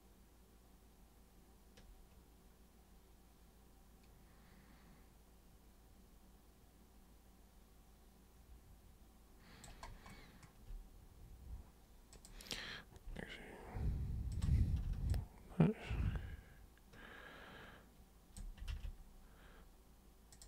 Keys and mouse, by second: 12.1 super+click, 14.3 ctrl+super+click, 15.1-18.4 alt+super+drag, 18.7 ctrl+super+z, 20.4 super+click.